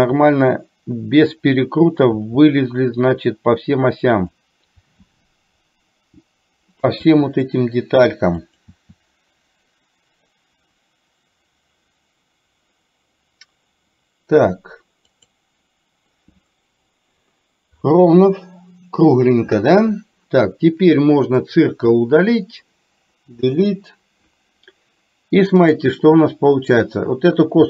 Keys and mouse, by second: 21.4 click, 23.4 Delete.